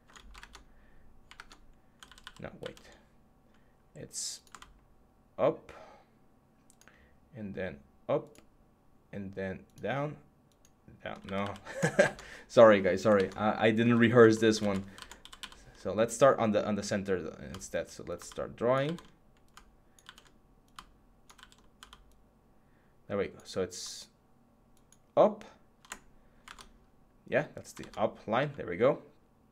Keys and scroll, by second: 0.0 Caps_Lock, 0.2 Tab, 1.1 Tab, 1.9 ctrl+z, 11.0 ctrl+z, 11.8 Tab, 12.9 Tab, 13.9 alt+z, 14.4 alt+z, 14.8 alt+z, 18.6 ctrl+z, 19.8 ctrl+z, 21.1 ctrl+z, 26.2 Tab, 27.6 Tab.